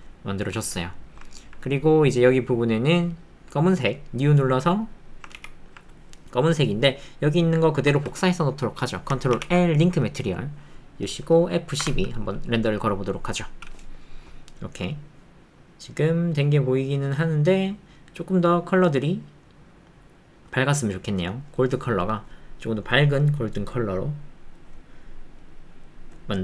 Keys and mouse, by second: 0.8 shift+middle click, 1.3 ctrl+middle click, 4.9 middle click, 12.1 F12.